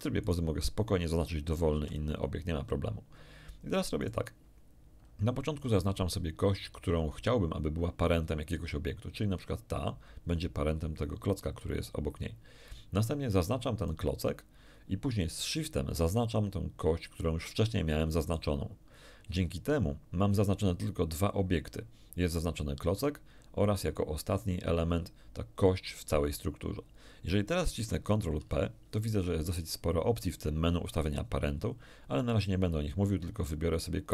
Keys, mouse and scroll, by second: 0.2 right click, 1.7 x, 1.8 click, 4.0 right click, 13.7 right click, 18.2 shift+right click, 28.3 ctrl+p.